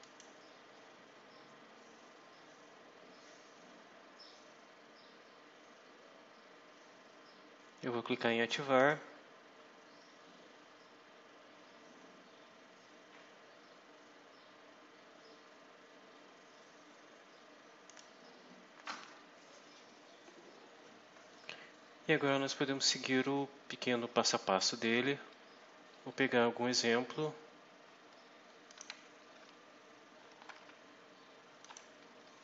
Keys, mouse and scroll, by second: 8.7 click, 17.8 click, 22.0 scroll down 2, 23.0 scroll down 2, 23.6 scroll down 2, 24.1-24.6 scroll down 2, 24.9-25.2 scroll down 2, 25.4 scroll up 2, 28.6 click, 30.2 ctrl+c, 31.5 click.